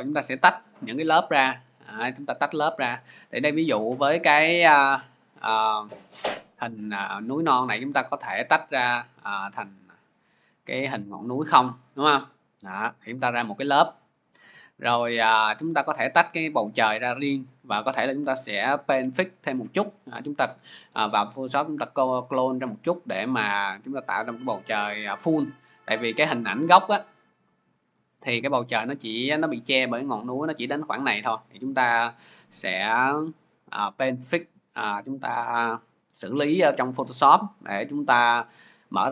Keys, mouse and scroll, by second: 8.7 click, 9.5 click, 11.4 click, 12.1 click, 15.8 click, 16.0 click, 25.9 click, 26.5 click, 32.1 click, 32.3 click.